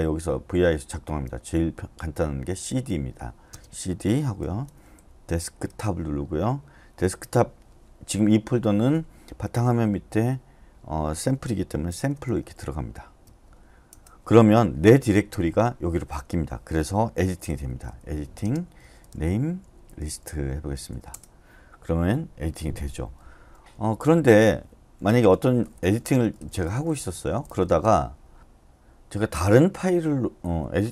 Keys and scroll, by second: 1.0-5.4 typing, 11.7-13.2 typing, 13.9 Return, 17.4-20.2 typing, 21.1 Return, 23.5-28.0 typing, 28.1 Escape.